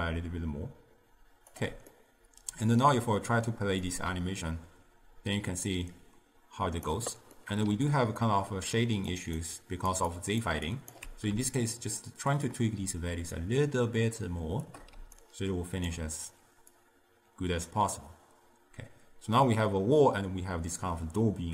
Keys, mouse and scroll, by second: 2.0-4.0 middle drag, 4.0-7.0 drag, 7.5 middle click, 7.8-11.2 typing, 8.4 middle click, 9.2 click, 9.7 click, 10.2 click, 10.8 click, 12.6-15.1 shift+drag, 15.1 d, 15.3 right click, 16.0 d, 16.9-20.0 drag.